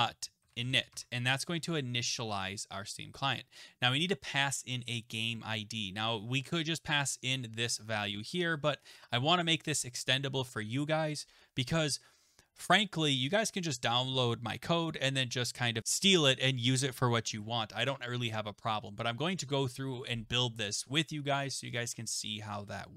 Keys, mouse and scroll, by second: 0.2-2.1 typing, 6.5 right click, 7.2 click, 7.7 click, 7.8 click, 8.9 click, 13.8 click.